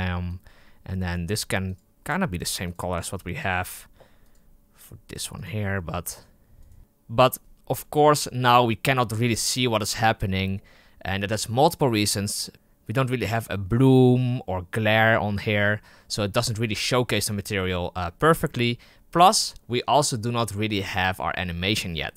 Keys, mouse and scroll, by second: 0.2-1.7 drag, 2.5 click, 6.6 right click.